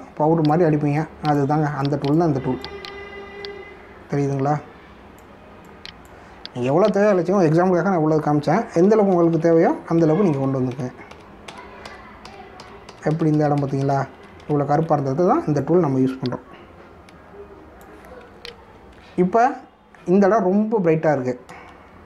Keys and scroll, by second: 9.8 ctrl+alt+z, 19.5 ctrl+alt+z.